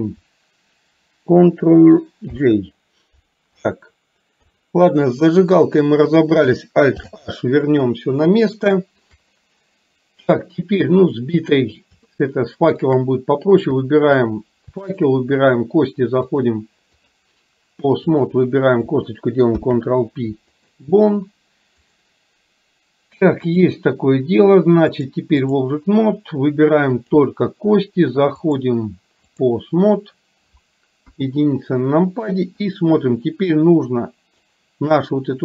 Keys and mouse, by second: 2.4 ctrl+j, 4.5 KP_3, 7.0 alt+h, 8.6 shift+middle click, 12.1 shift+middle click, 14.9 shift+click, 16.4 click, 18.3 click, 19.5 ctrl+p, 23.5 click, 25.1 click, 27.1 click, 28.6 click, 31.1 KP_1, 33.6-34.6 drag.